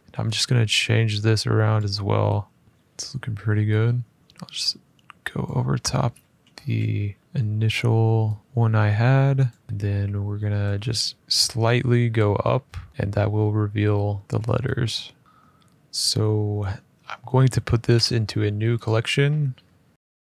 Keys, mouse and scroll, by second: 0.0 middle click, 1.5 click, 2.6 middle click, 5.2 click, 6.0 f, 6.9 middle click, 7.2 click, 7.2 `, 9.2 click, 10.0 middle click, 11.9 click, 12.9 middle click, 14.2 middle click, 15.4 middle click, 17.7-18.6 scroll, 17.7 m, 18.6 click, 19.9 scroll.